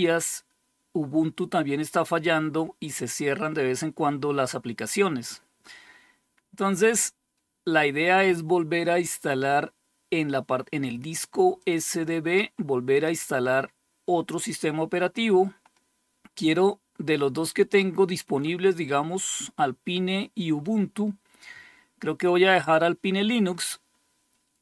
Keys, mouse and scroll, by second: 11.0-12.9 drag.